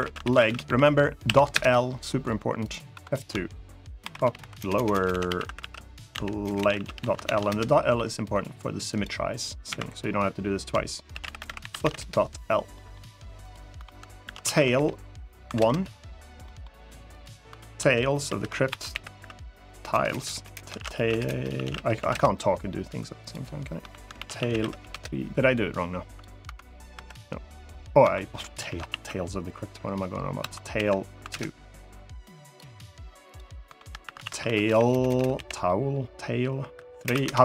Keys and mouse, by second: 2.6 F2, 4.1 p, 4.5 BackSpace, 4.6 BackSpace, 8.7 click, 9.4 F2, 11.1 o, 12.5 middle click, 13.5 F2, 16.2 middle click, 16.8 click, 17.2 F2, 19.7 BackSpace, 20.1 BackSpace, 21.0 BackSpace, 22.9 click, 23.5 F2, 25.8 click, 27.7 F2, 32.3 click, 33.0 click, 33.4 F2, 34.8 BackSpace.